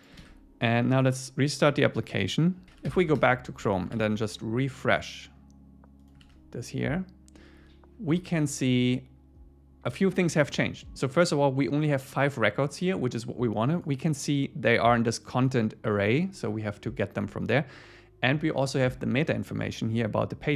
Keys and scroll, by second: 0.2 super+s, 3.2 Return, 4.0 super+r, 6.2 super+r.